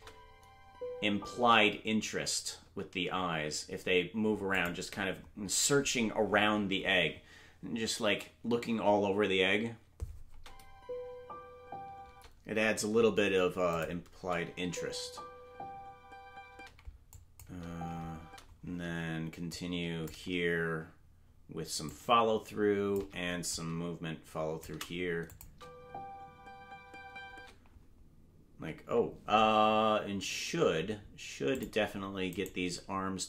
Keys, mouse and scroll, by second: 4.6 click, 4.6 space, 10.3 space, 13.7 click, 13.7 space, 14.2 space, 17.1 space, 17.1 click, 17.4 space, 19.5 click, 21.9-23.0 shift+drag, 23.5-24.7 drag, 25.3-27.4 drag, 25.5 space, 27.4 space, 31.5 click, 32.4-33.2 right drag.